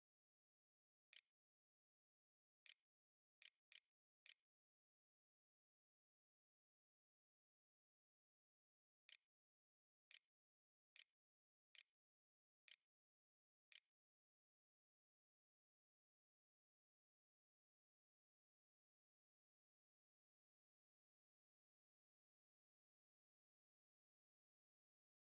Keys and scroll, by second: 0.0-5.1 typing, 6.6 6, 7.3 i, 8.4-14.9 typing.